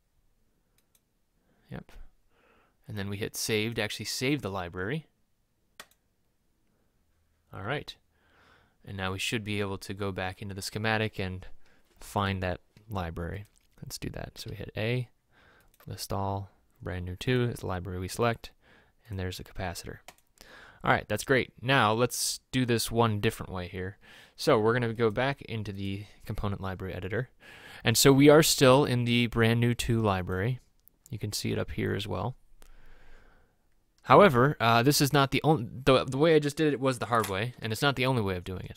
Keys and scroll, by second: 14.5 a.